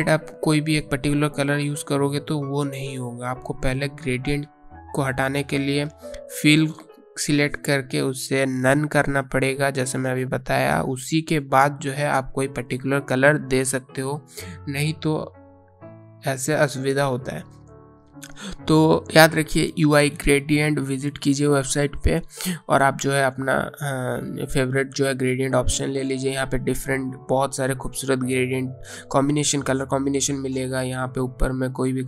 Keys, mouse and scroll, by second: 1.3 click, 1.9 click, 15.5 click, 21.5 click, 26.1 scroll up 1, 26.3-26.7 scroll down 1, 27.3 scroll up 1, 27.7 scroll down 1, 27.9-30.0 scroll up 1, 30.0 click, 31.2 click.